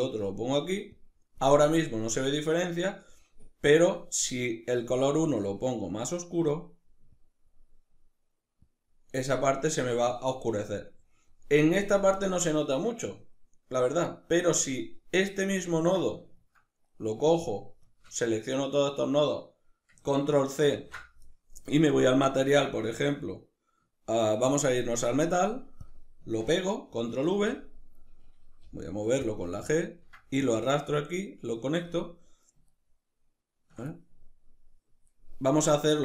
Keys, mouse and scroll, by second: 0.6 click, 3.3 click, 10.3-16.6 middle drag, 17.0 shift+right drag, 17.5 shift+right click, 20.3 ctrl+c, 21.5 click, 24.2 drag, 25.4 click, 26.8 ctrl+v, 29.0 click, 29.4 ctrl+middle click, 30.3 click, 32.4-36.0 ctrl+middle drag.